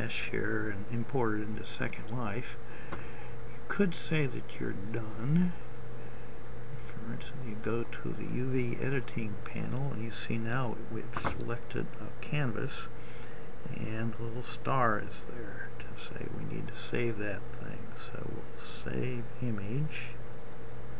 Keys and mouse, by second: 5.5-6.7 drag.